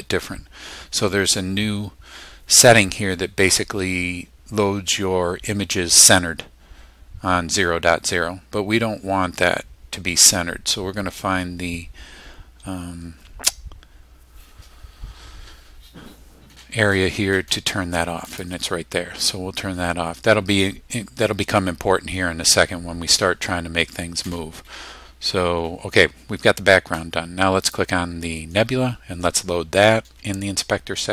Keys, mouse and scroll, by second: 2.3-2.6 scroll up 1, 11.2 scroll up 1, 11.9 scroll down 2, 12.5 scroll up 2, 18.3 click, 27.6 click.